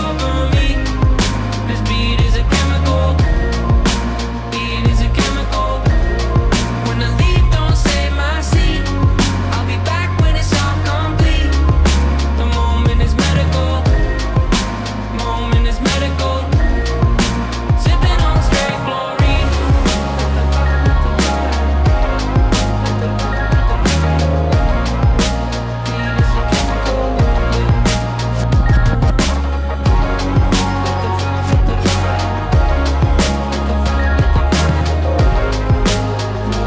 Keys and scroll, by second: 1.2 f, 4.5 e, 4.9 w, 6.8 e, 7.4 shift+z, 16.1 f, 16.5 f, 17.0 f, 17.7 f, 18.7-19.9 typing, 23.7 s, 24.3 x, 24.7 x, 27.4-28.8 typing, 32.7 s, 33.4 1, 33.8 e, 36.0 `, 36.3 w.